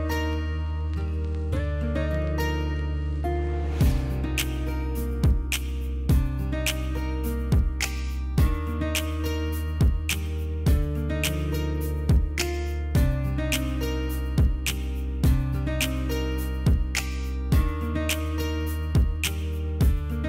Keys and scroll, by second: 15.8 F9, 16.2 space, 19.5 space.